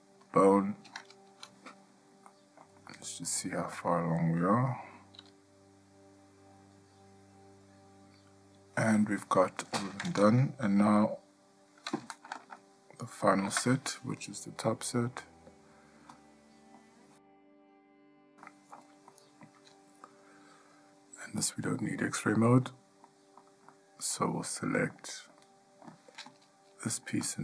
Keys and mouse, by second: 2.5-2.8 ctrl+middle drag, 3.1-3.5 shift+middle drag, 4.0 click, 5.4 g, 13.6 Tab, 15.2-16.9 middle drag, 18.6-19.0 shift+middle drag, 19.3-19.6 middle drag, 22.3 click, 23.2-23.6 middle drag, 24.0-24.4 shift+middle drag, 24.8-25.1 middle drag, 25.6-26.1 ctrl+middle drag, 26.5 click.